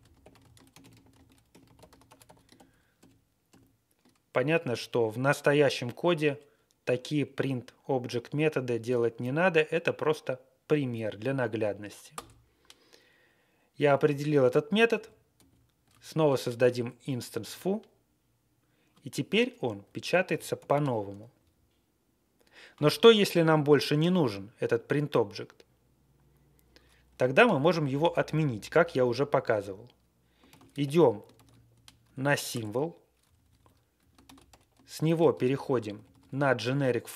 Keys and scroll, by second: 0.0-4.1 typing, 12.1 Return, 14.9 alt+p, 15.3 alt+p, 17.4 Return, 19.8 Page_Up, 20.2 ctrl+c, 21.3 Page_Down, 27.3 Page_Up, 27.5 Up, 27.8 Up, 28.8 Right, 29.1 Right, 29.1 Right, 29.1 Right, 29.2 Right, 29.2 Right, 29.3 Right, 29.3 Right, 29.4 Page_Up, 29.4 Tab, 29.4 Right, 29.8 Tab, 29.9 Right, 30.4 ctrl+c, 30.8-31.7 typing, 31.3 Tab, 31.3 ctrl+a, 31.6 ctrl+c, 32.4 Return, 33.2 Down, 33.3 Down, 33.5 Down, 33.9 Page_Up, 34.2 Up, 34.2 ctrl+x, 34.4 1, 34.4 Page_Up, 34.6 Up, 34.6 1, 35.1 alt+f, 35.4 alt+f, 35.5 alt+f, 35.8 alt+f, 35.9 alt+f, 36.0 1.